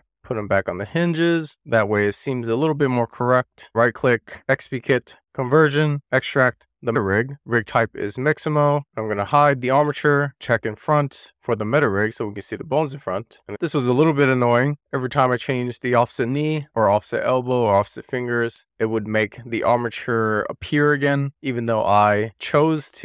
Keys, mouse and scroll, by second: 0.1 middle drag, 0.3 click, 0.9 scroll down 1, 1.1 click, 1.2 click, 1.4 middle click, 1.8 middle drag, 2.0 click, 2.1 middle click, 2.5 click, 3.1-3.5 scroll down 2, 3.2 middle click, 3.6 ^, 4.0-8.8 right drag, 8.8 click, 10.5 click, 11.1-12.9 scroll up 2, 12.9 shift+middle click, 14.8 click, 15.9 middle click, 16.8 shift+middle click, 18.2 click, 20.4 click.